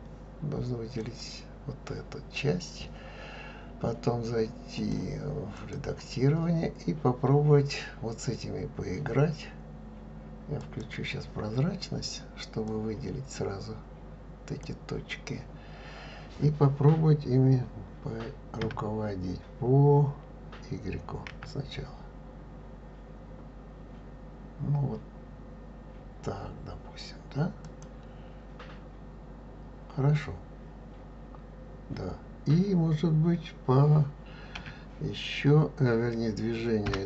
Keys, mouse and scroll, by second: 4.7-7.8 drag, 10.6 click, 12.6 click, 18.7 s, 34.6 s.